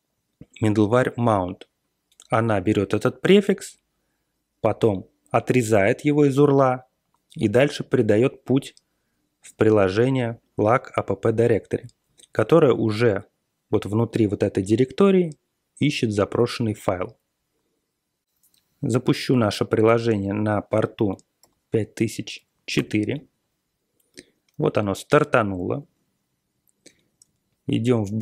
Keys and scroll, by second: 19.4 Left, 19.8 BackSpace, 21.4 4, 22.7 Return, 25.8 super+Tab.